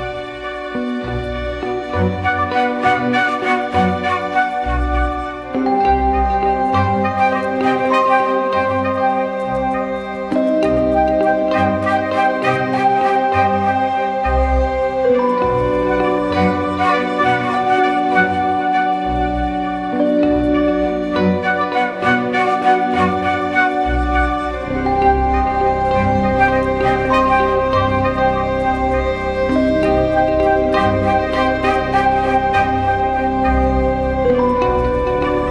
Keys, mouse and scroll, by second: 6.7-8.3 typing, 10.1 typing, 11.6 double click, 16.2 typing, 19.3 double click, 21.0 typing, 22.7 double click.